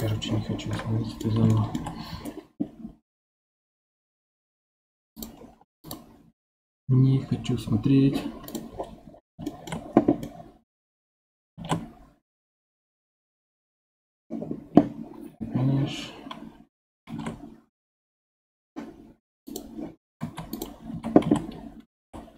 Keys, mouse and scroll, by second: 0.7-4.6 middle drag, 5.2-8.5 drag, 8.7-9.5 scroll down 8, 9.5-11.5 shift+middle drag, 11.5 shift+a, 17.1 shift+a, 20.2 ctrl+Tab, 20.9 1, 21.2 a, 22.0 m.